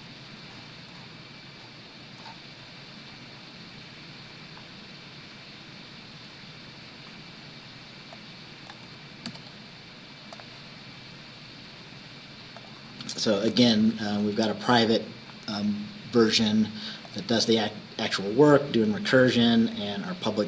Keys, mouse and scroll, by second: 0.0-1.3 scroll up 6, 1.5-1.9 scroll up 2, 2.2 scroll up 2, 2.3 scroll down 2, 3.2-3.7 scroll down 2, 8.2 click, 9.4 ctrl+c, 10.4 click, 12.6 click, 13.6 ctrl+v, 17.1 click, 18.6-19.0 scroll down 2.